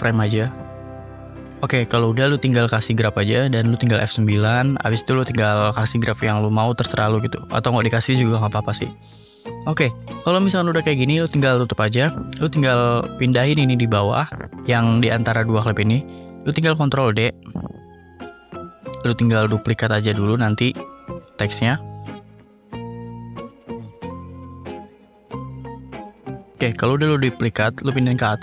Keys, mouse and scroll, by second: 1.3 click, 2.0 click, 2.8 click, 3.4 F9, 4.2 click, 6.2 click, 7.1 click, 8.6-9.6 drag, 10.5 click, 10.9-11.5 scroll up 1, 11.5-12.0 scroll up 3, 12.7 click, 13.8 ctrl+s, 16.1-17.1 drag, 17.3 click, 20.5 click, 22.1 click, 24.0 click, 25.0 click, 25.7 click, 26.3 click, 27.0 ctrl+d.